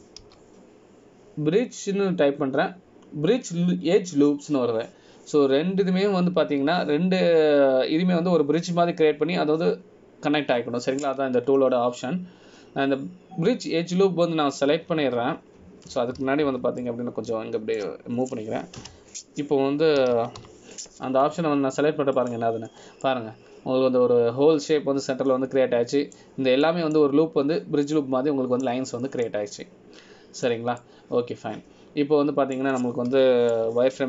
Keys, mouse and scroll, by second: 19.0 shift+middle click, 21.0 space, 25.2 middle click, 28.8 middle click, 30.0 middle click.